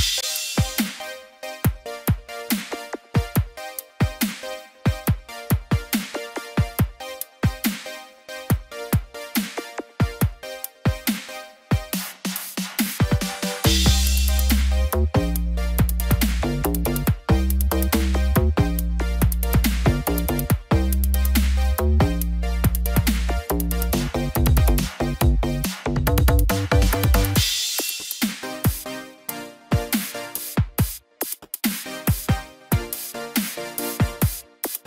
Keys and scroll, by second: 2.1 ctrl+z, 4.3 ctrl+z, 6.7 ctrl+-, 6.7 ctrl+0, 7.0 ctrl+=, 8.9 ctrl+z, 9.1 ctrl+=, 12.9 ctrl+z, 13.8 ctrl+-, 14.0 ctrl+0, 14.9 ctrl+=, 16.8 ctrl+z, 20.7 ctrl+-, 21.4 ctrl+0, 29.0 ctrl+=.